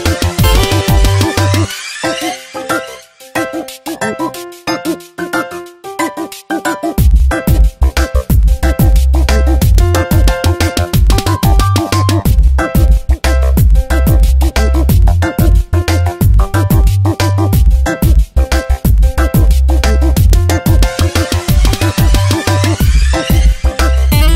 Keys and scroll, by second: 0.9 space, 5.5 space, 9.5 Tab, 19.0 p, 22.8 space.